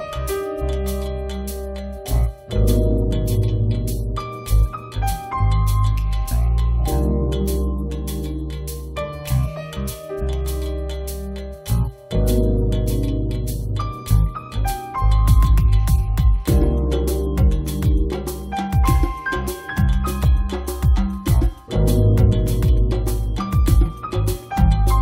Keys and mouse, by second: 0.3-2.1 middle drag, 2.5-3.9 middle drag, 3.5 click, 4.1 middle click, 4.4 click, 5.4 click, 6.3 middle click, 7.3 ctrl+s, 7.9 middle click, 10.1 middle click, 10.5 middle click, 12.3 right click, 12.8 1, 14.6 click, 14.6 right click, 14.8 click, 15.4 click, 16.1 click, 17.2 click, 19.8 click, 20.1 right click, 20.5-21.6 middle drag, 21.6 click, 22.1 right click, 22.5 click, 22.6 click, 22.6 right click, 22.9 click, 22.9 a, 23.6 click, 24.3 right click, 24.5 middle click.